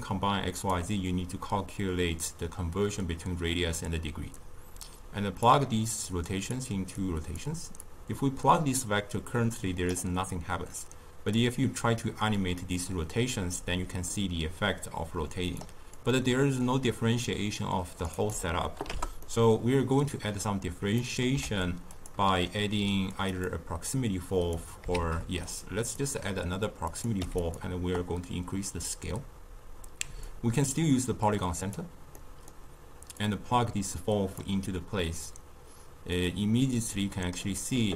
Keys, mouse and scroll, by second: 4.3-5.1 drag, 5.9 drag, 6.9 click, 7.8-10.8 drag, 11.3-14.3 drag, 15.9-19.2 drag, 19.2-21.3 middle drag, 21.3 ctrl+a, 22.2-23.1 middle drag, 23.1 click, 23.4 click, 24.9 shift+d, 26.8 click, 30.2-32.1 drag, 32.1-33.1 middle drag, 33.1-37.9 drag.